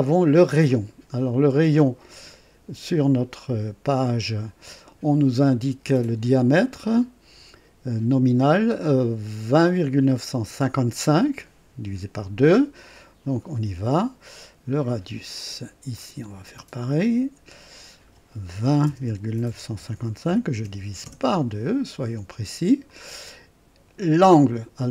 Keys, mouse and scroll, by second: 0.5 click, 2.0 click, 4.1 click, 6.8 scroll up 2, 12.9 click, 15.9 click, 16.9 click, 18.5-21.0 typing, 20.2 KP_Divide, 22.8 click, 22.8-23.6 typing, 24.0 click.